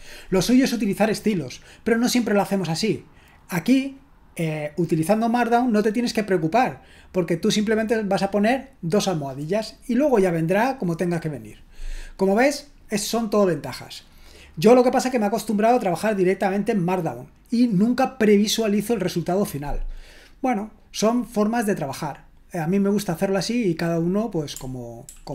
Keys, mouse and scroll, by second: 25.1 super+l.